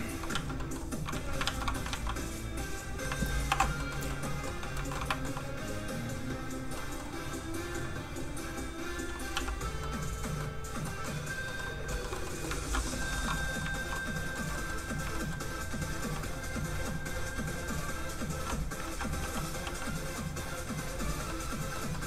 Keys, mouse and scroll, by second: 0.3 z, 0.5 middle click, 1.1 alt+z, 1.7 shift+z, 1.8 alt+middle click, 2.2 alt+click, 2.3 click, 3.5 alt+m, 3.8 middle click, 4.9 middle click, 5.0 alt+shift+middle click, 7.4 alt+shift+click, 7.5 click, 9.3 z, 9.8 middle click, 12.0 shift+middle click, 12.4 middle click, 12.8 middle click, 13.1 shift+middle click, 13.5 scroll up 1, 13.6 shift+middle click, 14.0 shift+middle click, 14.5 shift+middle click, 16.0 shift+f, 16.2 click, 16.7 f, 16.8 click, 18.8 ctrl+z, 19.3 click, 19.6 f, 19.7 click, 21.2 middle click.